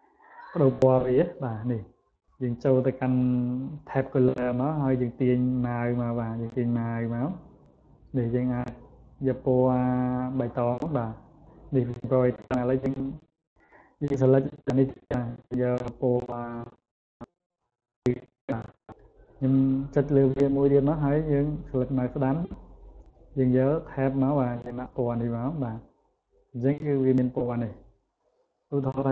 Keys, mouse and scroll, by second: 10.3 click, 11.1 click, 13.1 click, 13.9 click, 14.8 right click, 17.5 click, 18.1 click, 18.8 right click, 20.1 click, 20.8 right click, 24.8 click, 25.6 click, 26.2 click, 26.7 click, 27.3 click, 27.9 click, 29.0 click.